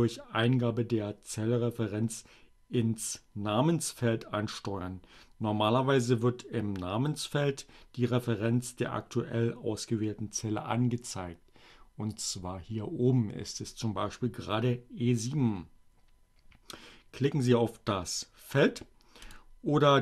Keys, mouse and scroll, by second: 18.1 click, 18.4 click.